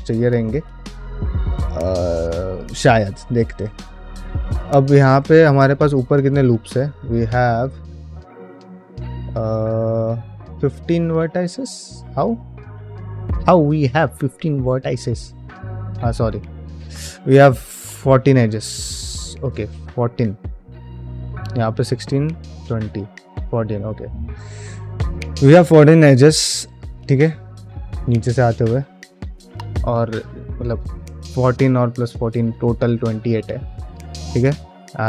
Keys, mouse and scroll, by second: 1.3 ctrl+Tab, 1.8 middle click, 2.0 shift+middle drag, 3.5 click, 4.0 middle click, 4.4 click, 4.9 Tab, 5.8 alt+click, 10.8-13.6 middle drag, 33.8 click, 34.3 Tab.